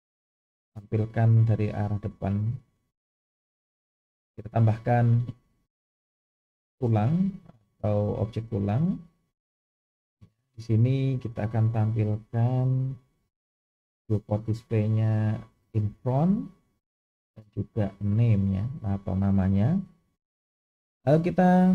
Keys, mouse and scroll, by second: 1.6-2.3 shift+middle drag, 3.0-3.4 scroll up 3, 6.6 shift+a, 12.4 click, 13.5 click, 15.8 click, 18.0 click, 18.9 scroll up 1.